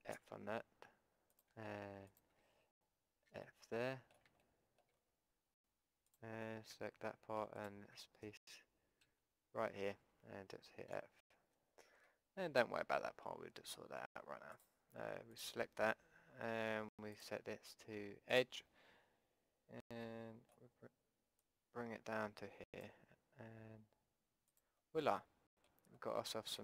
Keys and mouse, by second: 0.1 f, 1.3-3.3 drag, 3.3 f, 3.4-9.6 drag, 9.0 z, 9.6 middle click, 10.0 z, 11.0 f, 11.3 click, 14.5-19.1 drag, 20.0-21.4 middle drag, 21.4-23.4 drag, 24.5-26.5 drag, 26.5-26.6 middle drag.